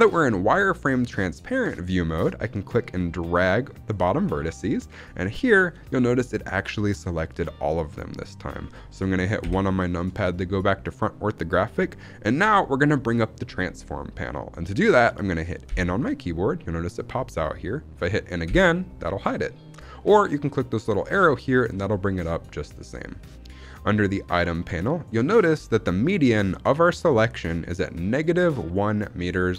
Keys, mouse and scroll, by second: 2.4-3.8 drag, 4.7-6.0 middle drag, 9.3 KP_1, 15.6 n, 18.4 n, 20.7 click.